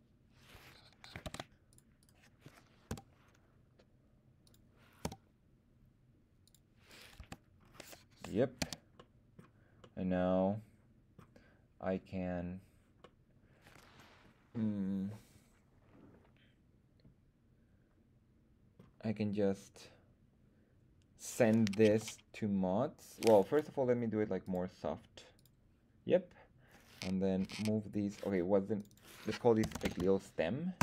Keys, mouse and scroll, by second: 1.2 ctrl+Tab, 2.0 click, 2.0 right click, 2.9 g, 4.4 click, 5.0 r, 6.4 click, 7.2 Tab, 7.6-8.1 scroll down 2, 8.6 z, 9.0-9.4 middle drag, 9.8-11.2 middle drag, 13.0-18.7 middle drag, 22.0 m, 24.4 click, 25.3 click, 27.4 m, 28.7 click, 28.8-30.8 drag.